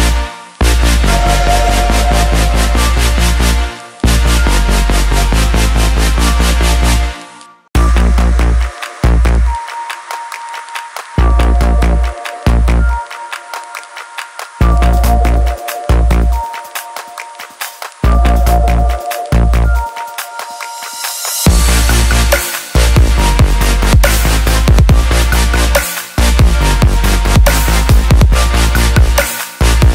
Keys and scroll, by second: 11.8 ctrl+0, 26.3-28.6 typing.